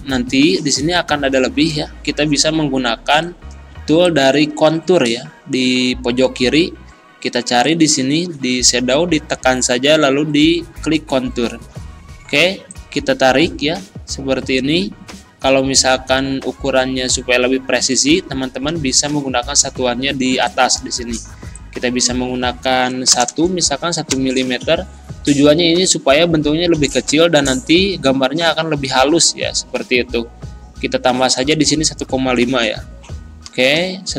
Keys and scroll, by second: 3.7 z, 23.1 BackSpace, 24.1 Return, 33.6 Return.